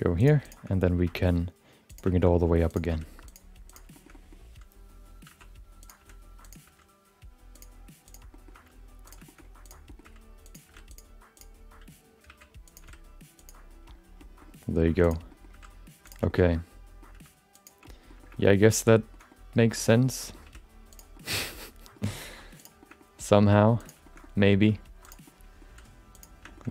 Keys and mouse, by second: 0.2 click, 0.4 shift+click, 0.7 middle click, 1.0 r, 2.1 shift+middle click, 2.3 middle click, 2.7 click, 2.9 r, 3.7 click, 3.9 middle click, 4.1 middle click, 5.3 e, 6.0 r, 6.6 g, 8.0 click, 8.3 middle click, 8.5 g, 9.2 shift+middle click, 9.6 click, 9.8 middle click, 10.0 g, 10.6 r, 11.3 click, 12.2 g, 12.8 r, 14.2 middle click, 15.0 click, 15.3 middle click, 15.6 g, 16.3 shift+middle click, 16.4 middle click, 17.1 g, 17.8 middle click, 18.2 shift+middle click, 18.4 middle click, 19.3 middle click, 19.9 middle click, 20.4 r, 21.1 middle click, 22.0 g, 22.8 shift+middle click, 23.0 middle click, 23.8 click, 24.0 shift+middle click, 24.2 middle click, 24.7 g, 25.2 middle click, 26.1 r, 26.5 shift+middle click, 26.6 middle click.